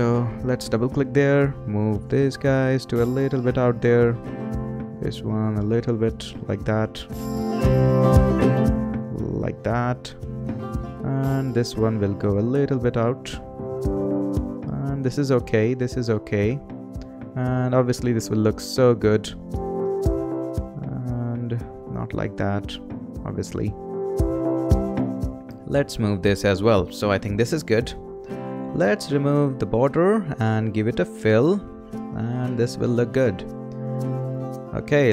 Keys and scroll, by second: 27.4 Return.